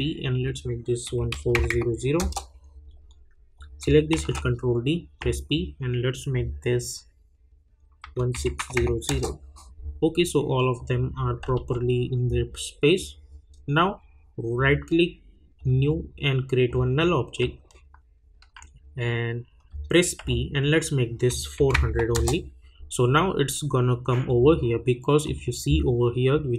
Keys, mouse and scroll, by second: 0.4 click, 2.2 Return, 3.5 click, 4.1 ctrl+d, 5.2 p, 6.3 click, 9.0 Return, 10.7 click, 11.5 u, 12.9 click, 14.5 right click, 15.5 click, 17.8-18.6 alt+scroll up 1, 20.2 p, 21.3 click, 22.1 Return, 25.2 click.